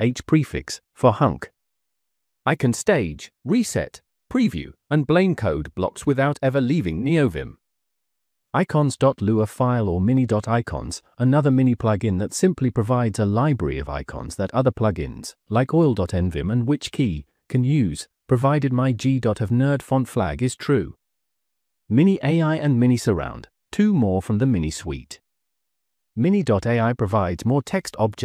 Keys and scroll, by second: 0.0-0.8 typing, 3.6 p, 4.3 Escape, 4.4 Escape, 4.6 Escape, 4.7-8.4 typing, 5.3 Escape, 7.1 Escape, 7.2 Escape, 11.0-13.1 typing, 16.0 Escape, 16.1-18.8 typing, 18.4 Escape, 18.5 Escape, 19.2 Return, 21.5-23.2 typing, 21.8 Return, 24.3-26.7 typing.